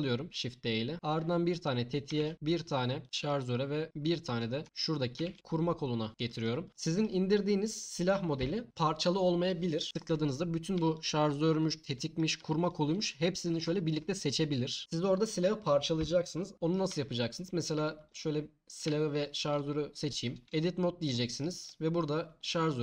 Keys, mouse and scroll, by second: 2.2 shift+d, 3.0 click, 5.2 shift+d, 6.1 click, 10.9 shift+click, 12.6 shift+click, 13.0-13.6 drag, 17.2-18.8 middle drag, 19.2 shift+click, 20.4 Tab.